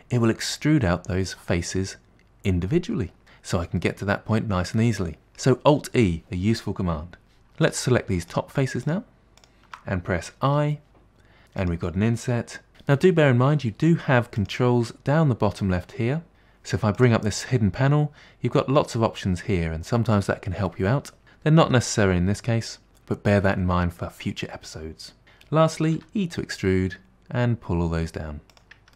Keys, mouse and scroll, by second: 3.9-5.5 middle drag, 7.7 click, 8.3 shift+click, 8.9 shift+click, 9.5 shift+click, 14.5 click, 16.3 click, 17.1 click, 26.1 e.